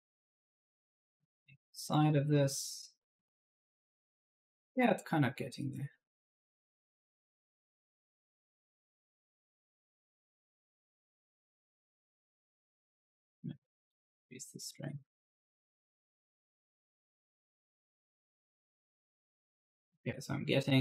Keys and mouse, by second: 0.0 click, 1.6-4.9 typing, 1.7 right click, 4.9 click, 10.0 right click, 10.9 click, 14.5 click, 17.0-19.2 typing, 17.1 right click.